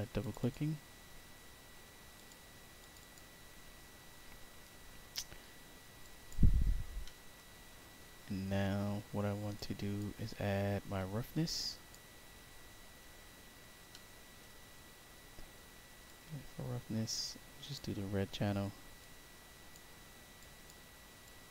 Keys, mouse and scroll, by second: 0.1 click, 0.3 click, 2.1 click, 2.7 click, 2.9 click, 5.9 click, 6.6-7.3 scroll down 1, 9.5 click, 10.9 click, 12.3 scroll down 2, 13.8 middle click, 16.0-17.7 drag, 18.9 click, 20.3 click, 21.2 click.